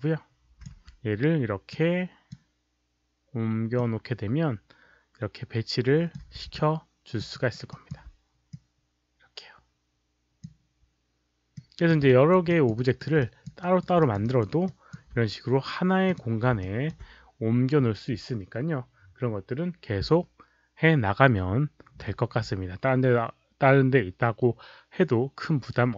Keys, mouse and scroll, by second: 0.7 w, 1.7 click, 3.7-6.1 drag, 6.5 f, 6.6-7.2 alt+drag, 7.3 alt+right click, 7.7 alt+click, 8.5-10.4 drag, 11.5-11.9 drag, 12.1 alt+f, 12.1 alt+right click, 12.5 alt+click, 12.7 alt+right click, 13.2 alt+drag, 13.6 alt+right click, 14.0 alt+click, 14.2 alt+right click, 14.6 alt+click, 16.0 click, 16.6 alt+click, 24.4 alt+click, 24.4 alt+right click.